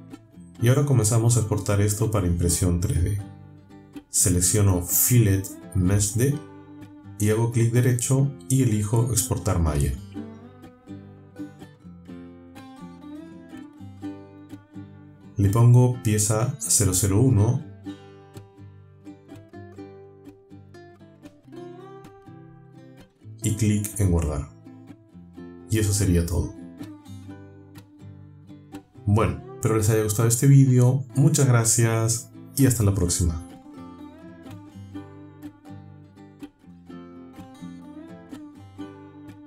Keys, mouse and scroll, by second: 1.5 click, 2.3 space, 3.2 click, 7.3 right click, 12.0 click, 13.9 click, 14.5 click, 16.3 click, 18.7-22.4 typing, 19.6 click, 20.8 click, 22.3 click, 23.4 click, 25.4 click, 26.8 click, 28.0 click, 29.1 click, 36.1 click, 36.8 space, 39.0 click.